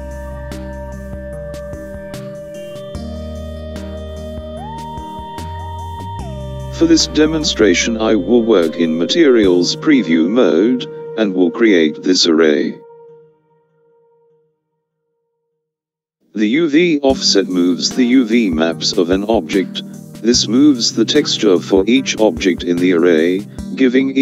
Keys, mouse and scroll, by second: 14.7-15.5 scroll down 2, 15.5-17.1 scroll down 1.